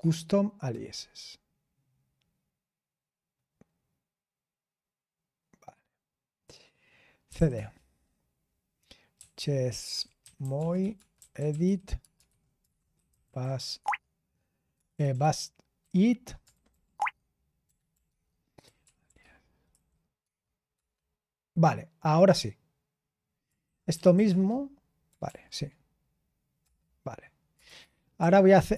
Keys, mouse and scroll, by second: 0.0-0.2 typing, 7.0-7.8 typing, 9.1-20.2 typing, 23.6-24.6 typing, 25.2 ctrl+p, 26.6 Return, 27.4-28.7 typing.